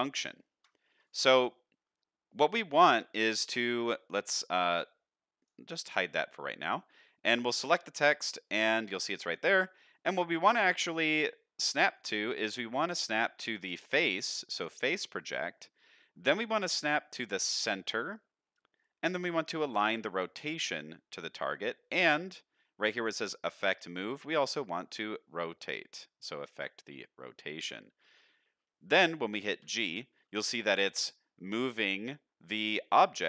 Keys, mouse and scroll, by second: 1.5 middle drag, 5.4 click, 7.5 click, 8.2 shift+middle drag, 8.7-9.4 scroll up 1, 9.4 scroll up 1, 9.5 shift+middle drag, 10.0 middle drag, 11.9-28.0 drag, 29.6 g.